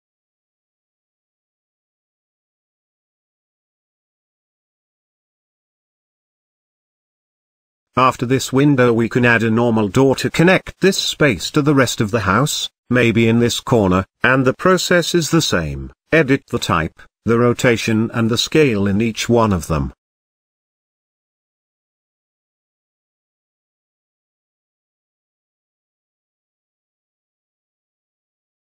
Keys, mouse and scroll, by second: 2.6 click, 3.5 alt+z, 3.9 click, 4.3 click, 5.5 alt+z, 6.0 g, 8.5-8.8 scroll down 3, 8.8-11.4 middle drag, 12.0-13.9 shift+right drag, 13.9-14.9 drag, 14.9-15.3 shift+middle drag, 15.3-15.8 scroll up 2, 15.8-16.2 scroll down 2, 16.2-16.9 middle drag, 16.9 click, 17.7-19.8 drag, 19.8-20.2 middle drag, 20.2 scroll up 2, 20.5-21.7 middle drag, 21.7 click, 22.7 click, 23.8 click, 24.5-26.1 shift+middle drag, 26.1 click, 27.2-27.6 scroll down 2, 27.6-28.7 scroll up 1.